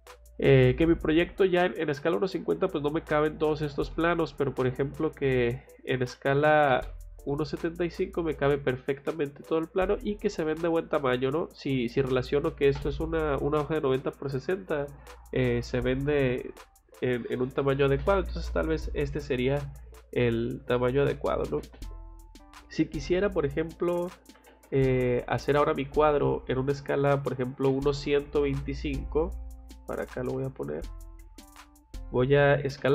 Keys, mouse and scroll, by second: 3.6 Escape, 3.9 middle click, 4.3 click, 4.5 click, 6.2 c, 6.6 o, 6.8 space, 6.8 click, 7.3 middle click, 9.8-10.1 scroll up 1, 18.3 Escape, 18.9 scroll down 2, 19.5 middle click, 22.1 click, 22.3 click, 23.9 c, 24.3 o, 24.6 space, 24.8 middle click, 27.8 click, 30.2 F8, 31.0 click, 31.2 Escape, 31.4 Escape, 31.5 click, 31.7 click, 32.2-32.9 typing.